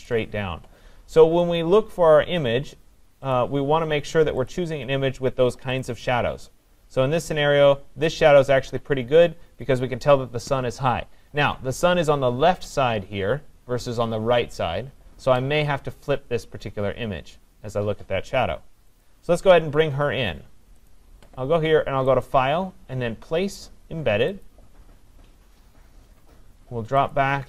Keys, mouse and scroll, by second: 1.6 click, 4.5 click, 5.8 click, 6.0 click, 7.9-8.5 scroll, 8.5-9.5 scroll, 11.1 scroll, 19.0 click, 20.9 click, 22.2 click, 24.5 click, 26.1-26.8 scroll, 26.8-27.1 scroll, 27.1 click.